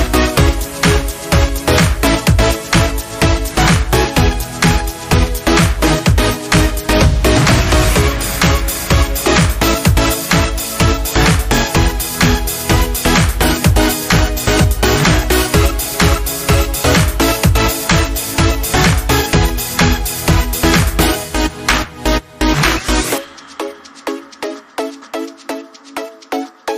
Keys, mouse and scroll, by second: 5.9 click, 12.4 click, 16.9 click.